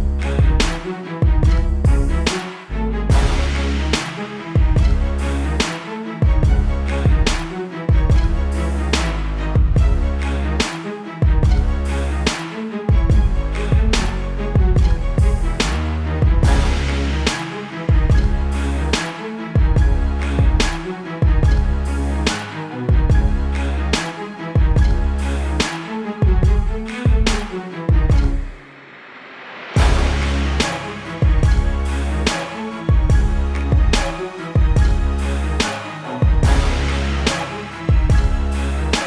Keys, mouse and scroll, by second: 1.8 space, 1.9 click, 2.3 space, 2.4 click, 2.7 ctrl+-, 3.0 space, 3.0 click, 3.4 ctrl+-, 5.6 ctrl+alt+click, 8.2-9.2 scroll down 1, 9.6 shift+click, 10.6 ctrl+e, 11.8 click, 20.6 click, 30.4 ctrl+t, 31.4 alt+shift+click, 32.8 click, 34.2 KP_Enter, 35.1 click, 36.2 KP_Enter, 36.5-37.0 scroll up 1, 37.8 click.